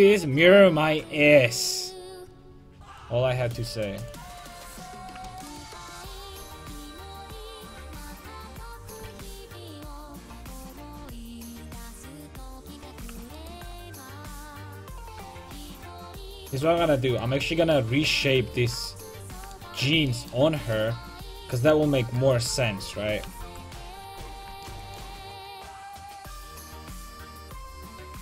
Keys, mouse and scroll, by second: 0.8 ctrl+z, 4.2-8.2 drag, 4.9 a, 5.4-7.7 right drag, 9.0 ctrl+z, 9.7-12.2 drag, 12.9 a, 13.4-16.0 right drag, 14.2-16.2 drag, 17.4 a, 18.9-22.2 middle drag, 23.3 KP_5, 23.4 KP_1, 25.4 c.